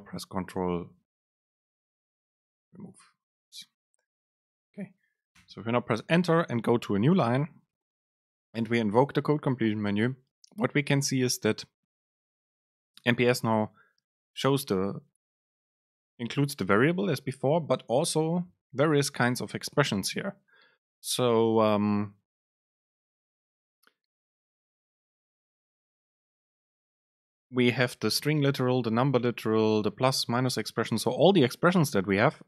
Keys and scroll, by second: 1.7 BackSpace, 2.7 ctrl+shift+super+Left, 3.6 BackSpace, 5.5 Return, 8.2 super+space.